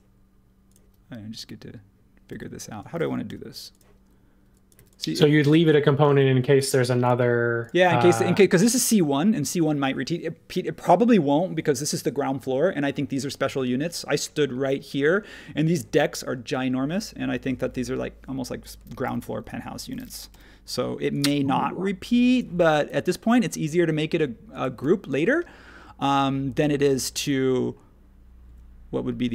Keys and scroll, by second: 2.3 ↺, 3.2 l, 4.7 e, 6.0 space, 19.0 h, 19.6 space, 20.3 l, 22.4 Escape, 24.8 Escape, 28.4 Escape.